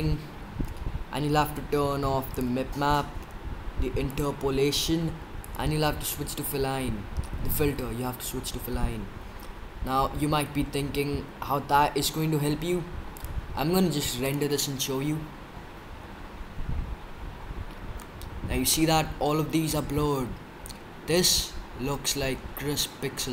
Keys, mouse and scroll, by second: 2.3-7.2 drag, 8.1-12.5 middle drag, 13.1-15.2 drag.